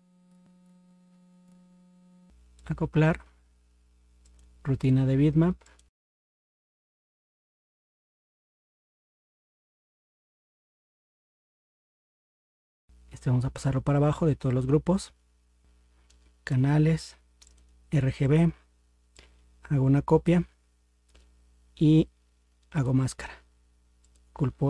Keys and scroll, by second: 11.6 ctrl+0.